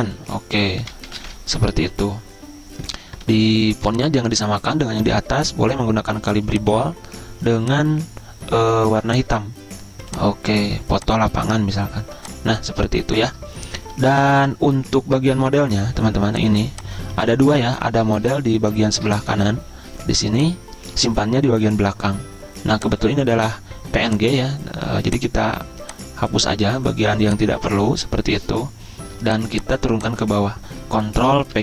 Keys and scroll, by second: 0.0-1.6 typing, 2.0 Escape, 3.5 ctrl+a, 31.5 ctrl+Page_Down.